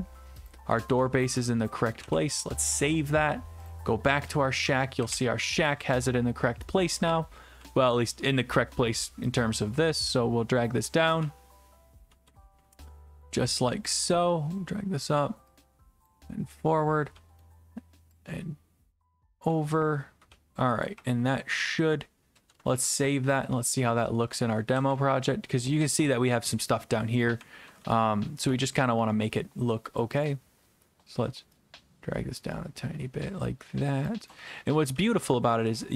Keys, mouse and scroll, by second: 0.5 click, 0.8-1.7 typing, 1.4 right click, 2.0 right click, 2.0 ctrl+s, 3.7 click, 4.0-8.4 typing, 5.7 right click, 8.3 right click, 10.9 click, 10.9-12.8 typing, 13.2 right click, 14.3 right click, 14.5-15.6 drag, 16.1-17.2 typing, 16.1-17.2 drag, 17.4-18.5 right drag, 19.2 click, 19.5-22.0 typing, 21.8 right click, 22.7 ctrl+s, 23.4 click, 24.2-29.0 typing, 30.5-34.0 drag, 34.2-35.9 typing, 35.8 middle click.